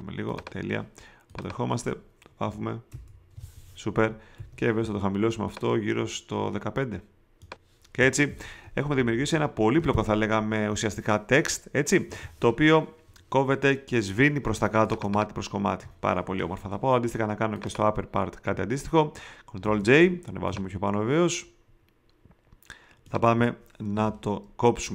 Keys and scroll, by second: 2.9 alt+BackSpace, 4.3 alt+super+d, 8.2 v, 8.9 shift+Up, 14.5 space, 19.6 super+j, 20.5 shift+super+j, 23.9 shift+m.